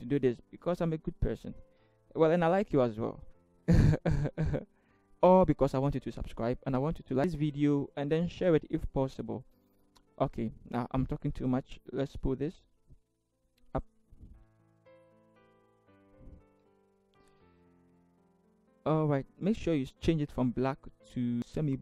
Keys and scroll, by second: 11.9 v, 14.5 shift+Left, 14.6 shift+Left, 14.8 shift+Left, 15.2 shift+Down, 15.4-15.9 shift+Down, 16.2 shift+Down, 16.6 shift+Down, 16.7 shift+Right, 16.9 shift+Right.